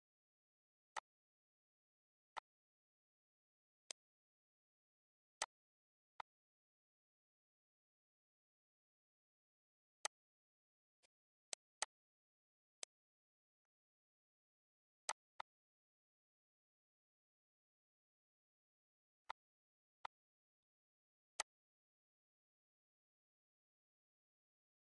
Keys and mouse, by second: 0.6 click, 2.1 click, 3.6 click, 4.4 click, 8.4 click, 9.4 click, 11.1 click, 11.9 click, 13.3 click, 14.8 ctrl+s, 17.5 click, 18.2 click, 19.4 click, 23.2 click, 23.9 click, 24.4 ctrl+s, 24.7 ctrl+s.